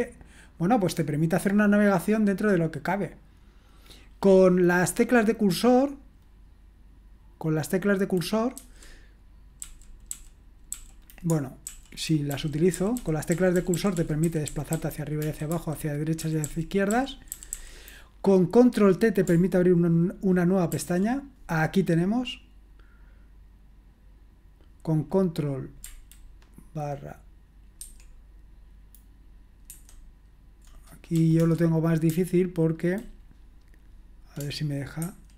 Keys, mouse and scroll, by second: 1.4-2.5 scroll up 1, 2.5 click, 2.5 scroll up 1, 8.6 Down, 9.6 Down, 10.1 Down, 10.7 Up, 10.9 typing, 11.7 super+l, 12.3-17.5 typing, 12.9 Down, 13.3 Up, 13.6 Up, 13.7 Up, 13.9 Up, 14.2 Down, 14.7 Down, 15.2 Right, 15.5 Left, 16.2 Up, 16.9 Up, 17.3 Down, 20.7 ctrl+t, 27.8 ctrl+º, 29.7 ctrl+Escape, 31.1 BackSpace, 31.4 BackSpace, 35.0 ctrl+\.